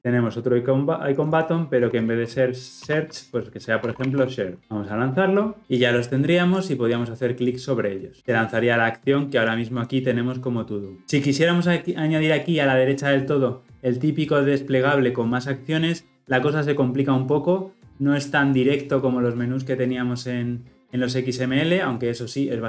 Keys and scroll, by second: 4.6 shift+F10.